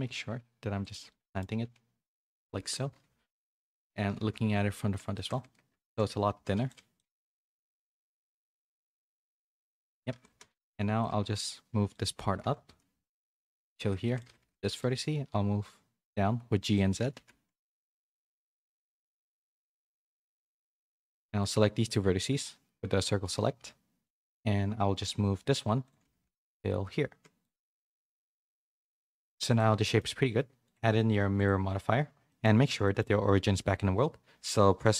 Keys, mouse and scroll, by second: 1.1 middle click, 1.4 g, 2.8 KP_3, 4.1 KP_1, 4.7 z, 5.1 shift+middle click, 5.7 Tab, 5.9-8.8 typing, 9.5 Tab, 10.1 a, 10.3 a, 10.5 b, 11.0 g, 12.6 KP_3, 14.1 shift+middle click, 14.4 a, 14.5 c, 14.9 g, 17.0-20.4 typing, 21.2 shift+middle click, 22.8 c, 23.5 e, 24.2 g, 26.0-28.6 typing, 28.4 Tab, 28.6 middle click, 29.4 click, 29.6 middle click, 30.6 click, 32.2 middle click, 32.8 shift+middle click.